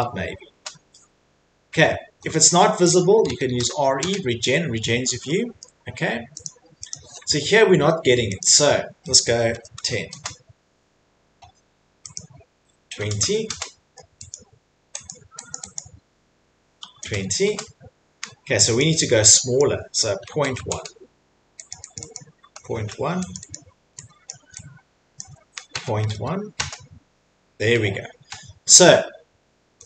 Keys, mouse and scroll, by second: 0.5 Return, 1.7 middle click, 1.7 typing, 2.0 middle click, 2.1 Escape, 2.3 Escape, 2.5 middle click, 3.0-3.7 typing, 5.6 middle click, 6.4 click, 6.9 click, 7.5 middle click, 8.4 click, 9.3-10.2 typing, 12.1 click, 12.5-13.5 typing, 14.3 click, 15.1 click, 15.5 click, 15.7 click, 16.9-17.4 typing, 18.5 Return, 18.8 click, 19.6 click, 20.5-23.2 typing, 21.7 click, 21.9 click, 22.5 Return, 22.5 click, 23.3 Return, 23.3 click, 23.9 click, 24.2 click, 25.2 click, 26.5 typing, 28.5-29.2 typing, 28.7 middle click, 28.8 middle click, 29.4 middle click.